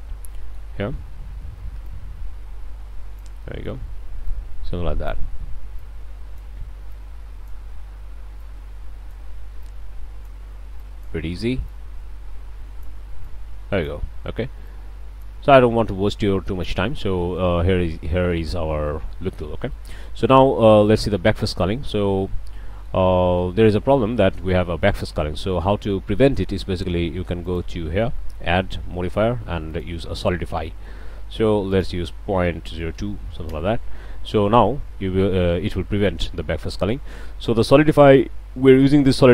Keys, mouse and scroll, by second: 0.9-1.9 shift+drag, 1.9-3.4 middle drag, 3.4-3.8 shift+middle drag, 4.3 middle click, 5.1 drag, 5.8 middle click, 6.4 drag, 6.9 click, 8.4 click, 9.6 click, 10.8-11.2 drag, 11.7-13.0 drag, 13.2 click, 14.7 click, 15.9 click, 16.9 scroll down 2, 17.2-17.6 drag, 18.1 click, 18.9-19.3 drag, 19.4 Tab, 19.7 click, 19.9 click, 20.1 drag, 20.4-21.8 middle drag, 22.0 click, 22.5-23.1 middle drag, 23.0 Tab, 23.4-23.9 middle drag, 24.8 click, 27.4 click, 29.7 click, 31.7 click, 32.5 ., 32.7 0, 32.9 2, 33.5 Return, 34.5-37.1 drag.